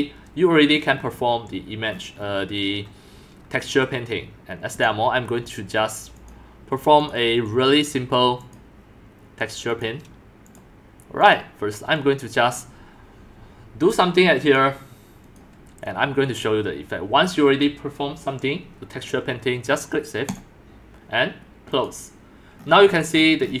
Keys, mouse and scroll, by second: 0.0 middle click, 0.0-1.0 scroll up 7, 1.0 middle click, 1.0-1.5 scroll down 4, 1.5 scroll, 2.7 middle click, 4.7 scroll, 4.8-5.2 drag, 6.3 click, 7.1 middle click, 8.5 middle click, 9.8-10.5 drag, 10.6 scroll, 11.3 scroll, 13.9 scroll up 3, 14.5 scroll up 1, 15.4 scroll up 1, 21.7 click, 21.9 click, 22.6-23.5 scroll up 18, 23.5-23.6 middle drag, 23.5 scroll, 23.5 scroll.